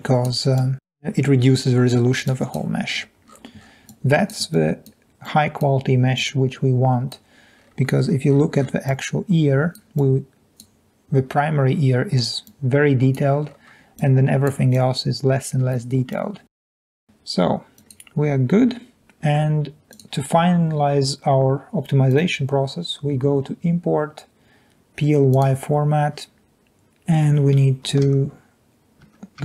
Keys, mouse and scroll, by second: 0.6 click, 2.8-3.2 scroll down 2, 3.0-3.9 middle drag, 3.2-3.9 scroll up 1, 3.8-4.4 drag, 3.9-4.2 scroll down 1, 4.2 scroll up 2, 4.5 click, 5.4 drag, 6.2 click, 7.5-8.1 scroll up 1, 8.1-9.4 scroll down 6, 8.8-9.8 drag, 10.0 click, 12.5 click, 13.4-13.9 scroll up 3, 14.1-14.4 drag, 16.8 click, 16.9 scroll down 2, 17.0 scroll up 2.